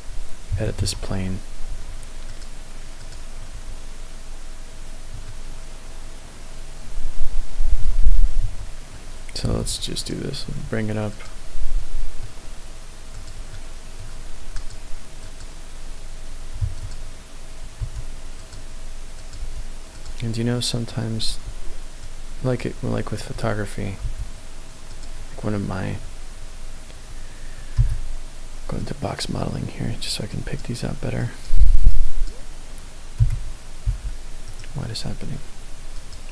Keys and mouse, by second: 0.8 Tab, 1.7 Tab, 2.2 click, 3.0 click, 3.6 Tab, 5.3-7.8 middle drag, 8.5 Tab, 9.4 g, 9.6 z, 10.1 click, 10.6 Tab, 11.1 click, 11.8 middle click, 13.2 click, 13.5 middle click, 14.6 click, 15.1 click, 16.7 1, 16.7 click, 17.8 g, 18.4 click, 19.1 click, 19.4 g, 19.9 click, 20.9 click, 21.3 g, 22.1 click, 24.0 g, 24.9 click, 27.7 b, 30.3 click, 31.3 click, 31.9 click, 33.1 b, 35.9 click.